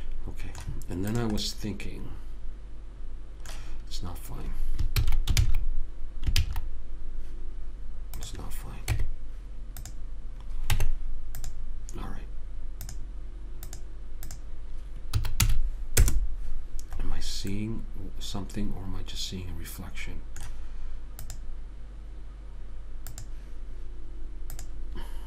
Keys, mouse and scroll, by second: 0.0 a, 5.3 ctrl+z, 5.7 ctrl+z, 6.7 ctrl+z, 8.5 click, 9.3 Tab, 11.0 Tab, 13.2-16.1 drag, 17.5-19.8 middle drag, 21.6 click.